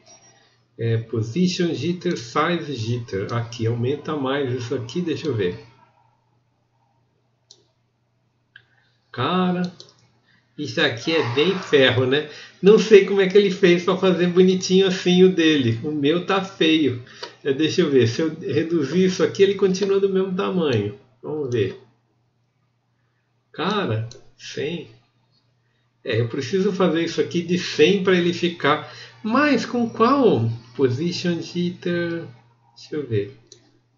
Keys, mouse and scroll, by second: 12.7-14.6 alt+middle drag.